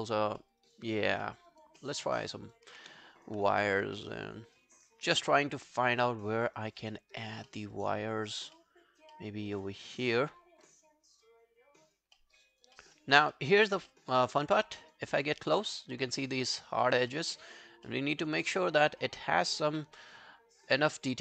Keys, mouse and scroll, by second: 0.4 alt+middle click, 0.6 alt+right click, 0.9 alt+click, 1.3 alt+middle click, 1.5 alt+right click, 1.8 alt+middle click, 2.0 alt+right click, 2.4 alt+right click, 3.6 alt+middle click, 4.0 alt+click, 5.7 alt+middle click, 5.9 alt+right click, 6.2 alt+click, 6.6 alt+right click, 6.9 alt+middle click, 7.2 alt+right click, 7.5 alt+middle click, 7.8 alt+right click, 8.0 alt+click, 8.6 alt+middle click, 9.1 alt+middle click, 10.5 alt+scroll down 3, 10.7 alt+click, 12.2 alt+middle click, 12.5 alt+right click, 12.8 alt+middle click, 13.0 alt+right click, 13.3 alt+middle click, 13.6 alt+right click, 13.9 alt+middle click, 14.3 alt+right click, 14.6 alt+middle click, 14.8 alt+right click, 17.1 alt+middle click, 17.5 alt+right click, 17.9 alt+middle click, 18.2 alt+right click, 19.8 alt+middle click, 20.1 alt+right click, 20.4 alt+scroll down 1, 20.7 alt+click.